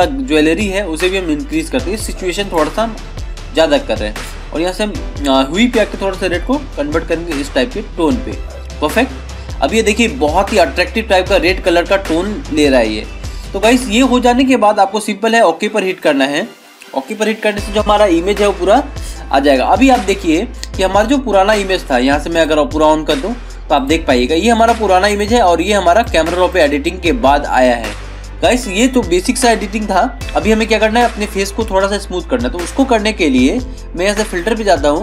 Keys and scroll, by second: 30.2 ctrl+=, 30.7 ctrl+-.